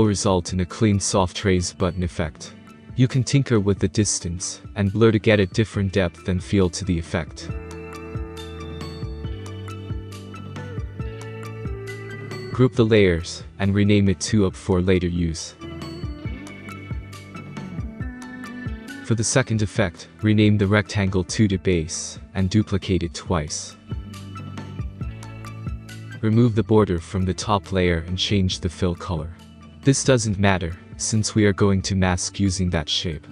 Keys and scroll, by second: 0.2 space, 10.0 space, 17.6 typing, 18.1 Return, 22.5-23.5 typing, 24.4 ctrl+d, 24.7 ctrl+d.